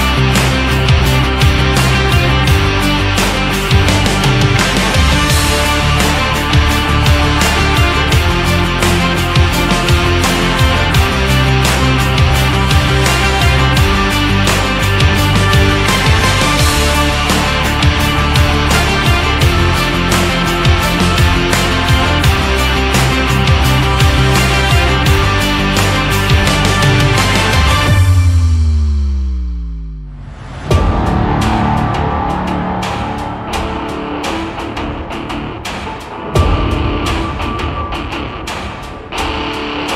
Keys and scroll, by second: 0.8 shift+Down, 1.7 Up, 3.1 Up, 5.2 Down, 6.2 Up, 10.6 BackSpace, 20.8 ctrl+z, 26.6 Up, 27.2 Up, 28.0 Up, 30.0 Left, 30.7 Left, 33.0 Up.